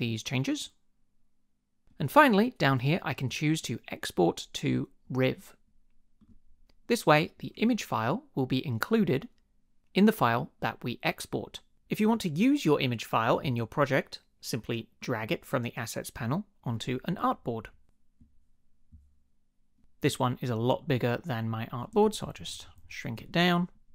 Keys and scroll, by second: 22.0 shift+Down, 22.8 shift+Down, 23.4 Return.